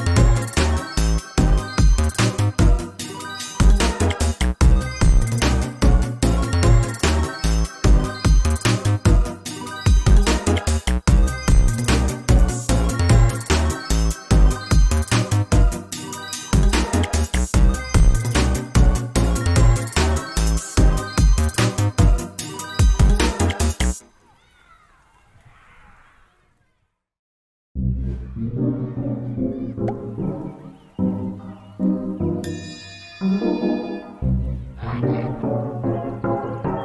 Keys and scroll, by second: 1.4 ctrl+space, 3.0 ctrl+x, 3.7 ctrl+v, 6.0 ctrl+space, 10.9 ctrl+space, 11.9 ctrl+z, 12.3 ctrl+c, 16.3 ctrl+space, 22.3 ctrl+c, 34.1 ctrl+a, 36.5 ctrl+space.